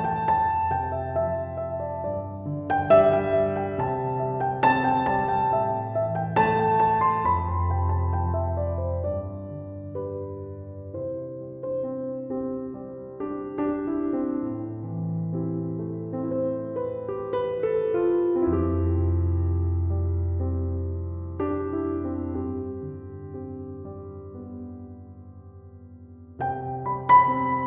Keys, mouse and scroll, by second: 9.4 0, 9.8 Return, 21.9 7, 22.4 Return.